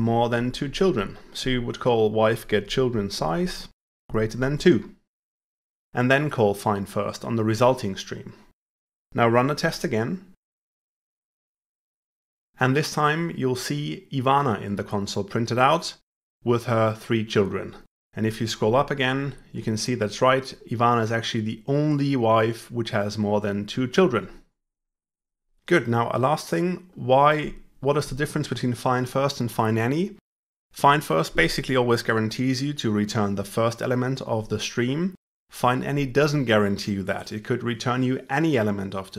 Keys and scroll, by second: 9.5 ctrl+F5.